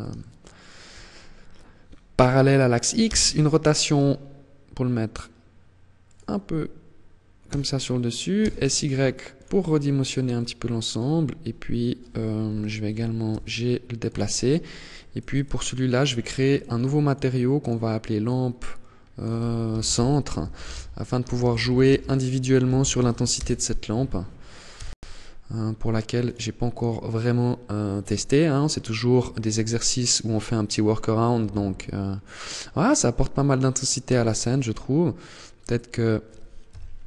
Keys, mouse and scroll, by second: 2.2 r, 5.3 click, 6.6 s, 8.7 click, 9.2-9.5 scroll down 1, 9.5 middle click, 11.6 KP_3, 12.4 g, 13.4 click, 14.0 click, 14.6 click, 15.7 click, 16.2 click, 16.7 click, 23.9 KP_0, 25.3 click, 27.8-28.4 scroll up 2.